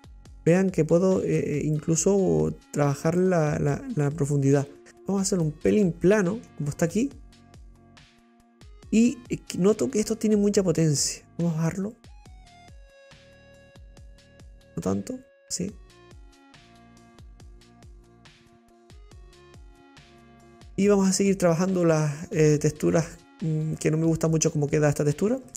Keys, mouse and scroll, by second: 6.6 scroll down 2, 6.9-12.5 middle drag, 12.5-14.5 drag, 17.5-19.6 drag, 19.6-20.7 middle drag, 21.4 scroll down 3, 21.8-23.5 middle drag, 23.5 scroll down 2, 23.7 scroll up 1, 23.7-24.3 middle drag, 24.3-24.6 scroll up 3.